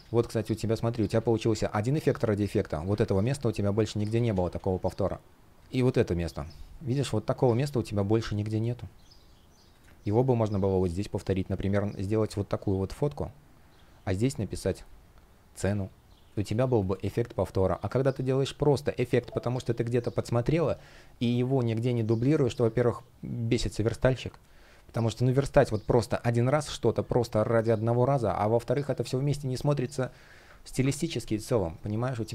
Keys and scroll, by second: 0.4 shift+p, 2.6 super+z, 7.2 super+z, 7.6 space, 16.0 space, 24.1 space, 27.8 space.